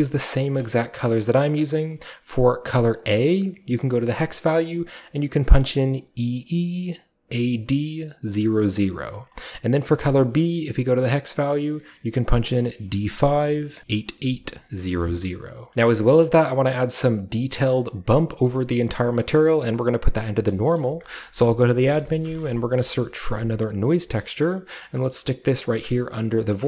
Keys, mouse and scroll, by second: 0.5-1.5 middle drag, 0.6-3.0 scroll up 1, 1.4 click, 3.0 click, 3.0-3.3 scroll up 1, 4.2 drag, 9.9 click, 11.0-14.8 drag, 14.8-15.7 scroll down 1, 15.7-18.1 scroll up 1, 18.1 scroll up 1, 18.3 scroll down 2, 18.5-20.3 middle drag, 20.5 middle click, 20.8-22.1 middle drag, 21.1 shift+click, 22.1-22.4 typing, 22.8 Return, 24.0 typing, 24.7-26.6 drag, 24.9-26.4 scroll down 1, 24.9-26.6 middle drag.